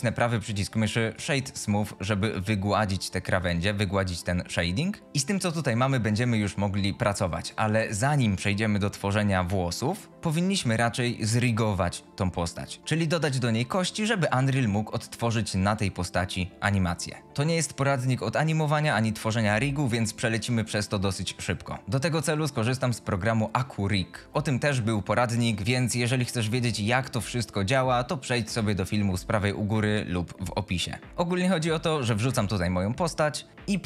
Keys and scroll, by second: 5.0 x.